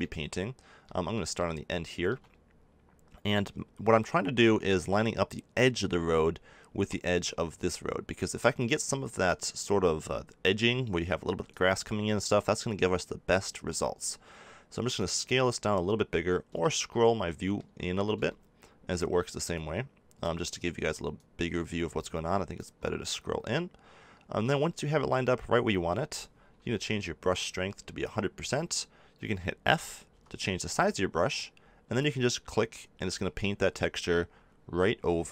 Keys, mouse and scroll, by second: 0.0-7.5 middle drag, 7.5-10.4 drag, 11.5-16.6 drag, 16.6-19.5 middle drag, 19.5-30.1 drag, 30.1 f, 31.3-35.3 drag.